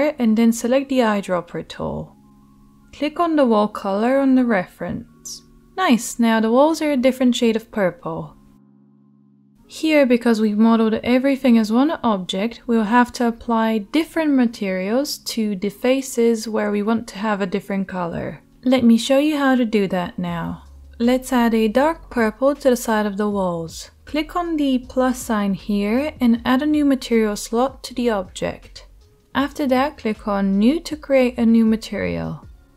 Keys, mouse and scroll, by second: 0.1-24.0 middle drag, 16.9 Tab, 24.0-31.6 drag, 31.6 middle click, 31.7-32.7 drag.